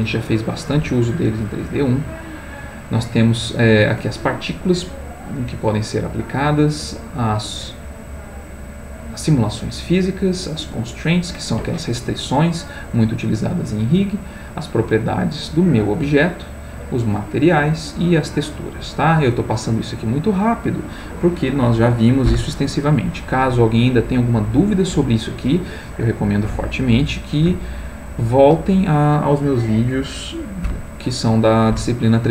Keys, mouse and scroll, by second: 1.2 click, 2.5 click, 6.6 click, 10.3 click, 14.3 click, 17.1 click, 18.1 click.